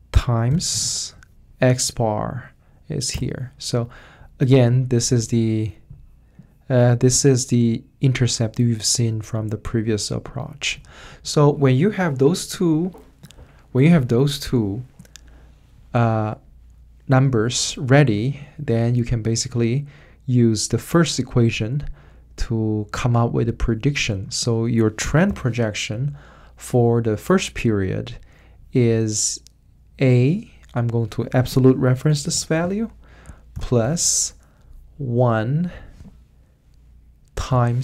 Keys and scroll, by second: 0.5 shift+8, 3.1 Return, 25.2 =, 32.3 F4, 33.5 shift+=, 37.5 shift+8.